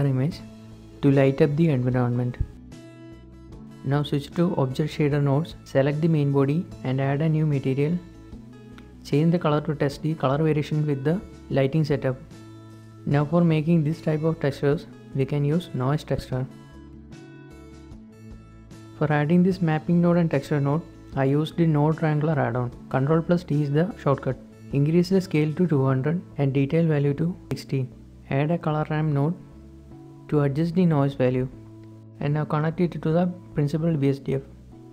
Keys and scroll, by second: 11.8 Escape, 11.8 a, 16.3 a, 19.5 ctrl+t, 20.9 g, 23.9-24.3 typing, 24.8 Return, 26.1-27.3 typing, 26.9 Return, 31.7 Return, 31.7 typing.